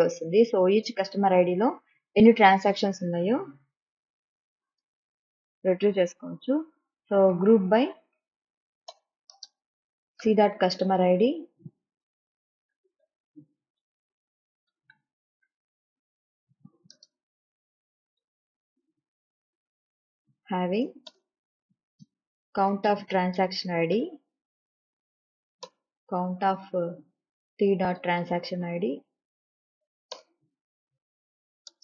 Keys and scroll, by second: 7.0-8.3 typing, 9.1 Return, 9.5-15.6 typing, 17.2 space, 18.2-19.0 typing, 21.3 Return, 22.1-24.1 typing, 25.6 Down, 25.9 Return, 26.7 Left, 27.1-29.1 typing, 30.1 Down, 30.4 Return, 31.6 Right.